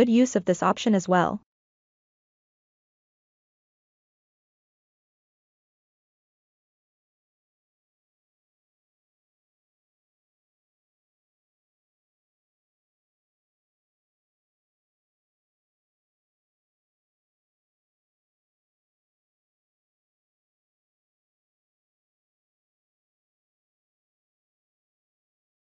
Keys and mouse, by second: 0.1-1.7 drag, 2.3 middle click, 3.3-4.8 middle drag, 5.0-6.2 middle drag, 6.9-10.5 middle drag, 11.3 click, 12.1 f, 13.6-15.5 drag, 16.1 middle click, 18.1 ctrl+middle click, 18.4-19.8 middle drag, 20.1 ctrl+middle click, 21.4 middle click.